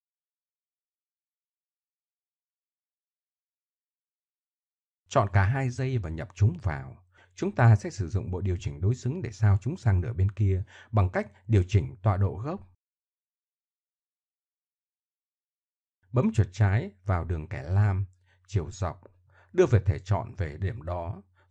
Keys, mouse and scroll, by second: 0.5 Tab, 1.5 KP_1, 2.9 ctrl+KP_1, 3.7 KP_1, 4.5 middle click, 6.3-7.2 right drag, 7.2 click, 9.3 ctrl+j, 11.0 middle drag, 14.0 middle click, 14.8 right click, 15.0-16.0 drag, 16.4 shift+s, 19.0 click, 20.0 click.